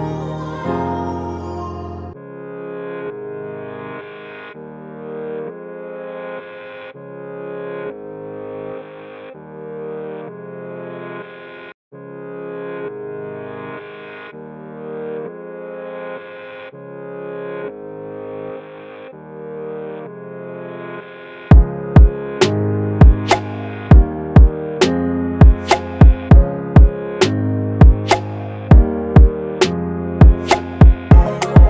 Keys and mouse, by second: 1.0 Return, 2.7 Return, 2.8 click, 4.4-6.2 drag, 6.2-6.5 typing, 7.2 Return, 10.1 click, 12.7 5, 13.5 Return, 16.8 click, 19.6 click, 19.6 click, 24.0-25.2 drag, 25.2 1, 26.8 Return, 30.8 click.